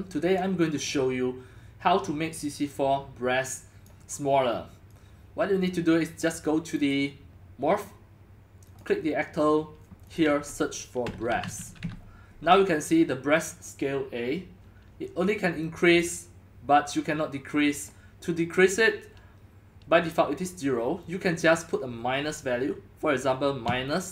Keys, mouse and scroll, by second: 2.2-2.6 drag, 3.8-4.2 drag, 4.9 click, 6.2-11.6 drag, 10.8-12.3 typing, 15.1 click, 15.1 typing, 16.6 drag, 16.7 typing, 16.8 drag, 17.8-21.8 drag, 21.7 right click, 21.8-23.0 middle drag, 23.0 click, 23.4-24.1 typing, 23.9 click.